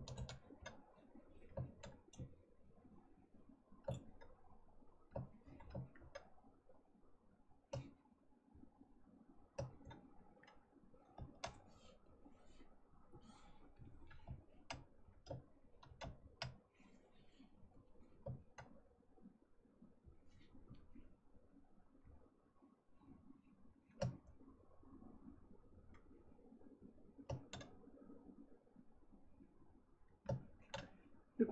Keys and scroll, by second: 0.1 ctrl+z.